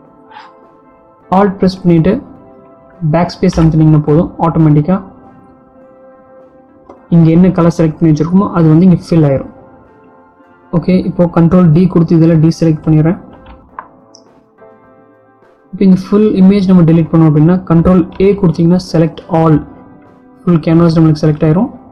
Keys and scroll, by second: 0.8 alt+BackSpace, 11.2 ctrl+d, 19.3 ctrl+a.